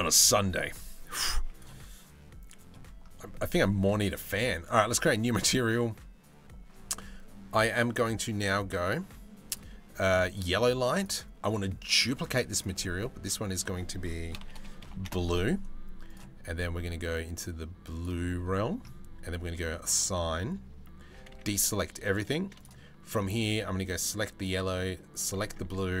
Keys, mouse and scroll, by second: 5.1-9.1 right drag, 9.9 right click, 11.6 right click, 12.2-14.0 right drag, 14.0 shift+click, 19.4 click, 20.8 a, 20.9 a, 22.2 click, 23.5 click, 24.0 click, 24.9-26.0 drag.